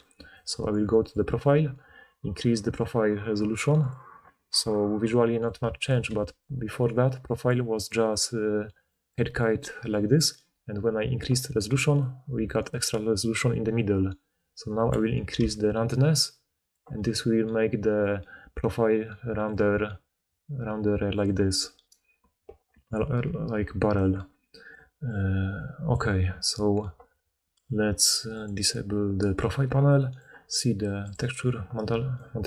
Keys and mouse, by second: 0.0-0.4 typing, 7.4-10.4 d, 11.6-12.8 d, 17.3-21.5 d, 22.6 d, 22.7 d, 25.6-31.1 middle drag, 31.1 right click.